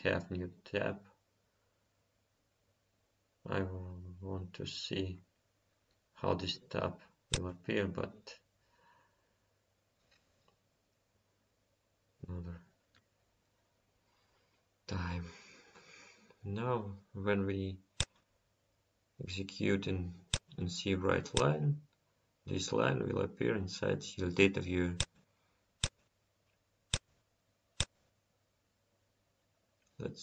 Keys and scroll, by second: 0.5 F10, 15.4 F10, 28.2 F5.